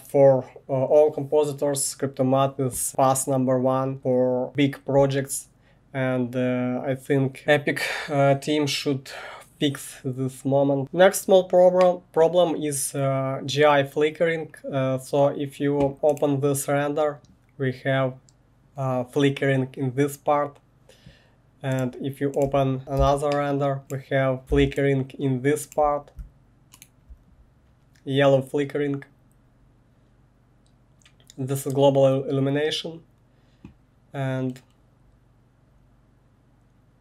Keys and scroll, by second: 22.8 1, 23.0 space.